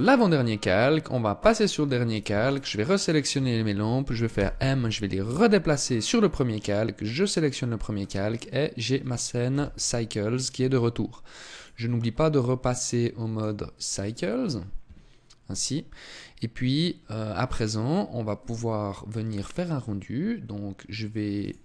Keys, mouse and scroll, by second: 0.8 click, 1.5 right click, 1.8 shift+right click, 2.5 right click, 3.7 m, 6.5 click, 7.2-7.7 scroll up 2, 7.7 middle click, 8.9 KP_0, 9.7 scroll up 2, 10.9 click, 16.3-17.9 scroll up 1, 20.7 click.